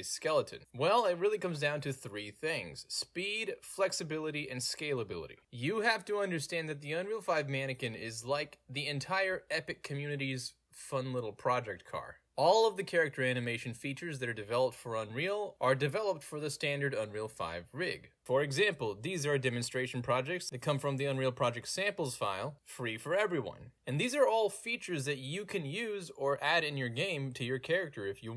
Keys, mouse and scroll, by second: 0.6 w, 19.2 w, 20.5 click, 22.8-27.0 drag, 27.3 d, 27.5 w.